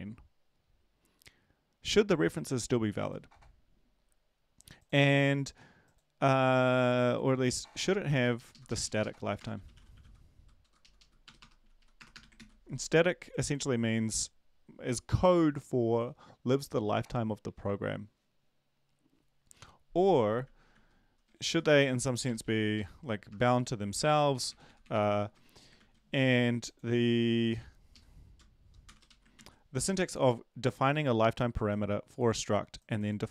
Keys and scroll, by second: 9.2-12.1 typing, 10.6 Left, 10.8 Left, 10.9 Left, 11.8 Left, 11.8 Right, 12.3 ctrl+s, 20.2 Up, 20.4 ctrl+z, 20.7 ctrl+z, 21.5 Down, 22.2 Right, 22.2 BackSpace, 22.4 Right, 22.7 ;, 23.9 Delete, 24.1 Delete, 24.3 Delete, 24.9 Delete, 24.9 a, 25.8 ctrl+s, 29.0 Left, 29.0 Right, 29.0 &, 29.3 ctrl+s.